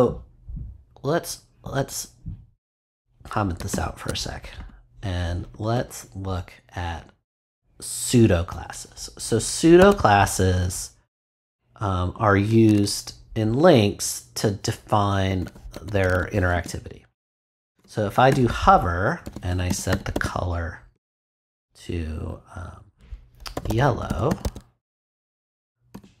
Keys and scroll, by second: 3.7 super+/, 5.5 Return, 9.8 a, 12.6 shift+;, 15.3 h, 16.5 space, 17.3 shift+space, 17.7 shift+[, 18.3 shift+Return, 18.8 Return, 19.2 c, 20.7-21.6 typing, 23.3-24.4 typing, 25.9 ;.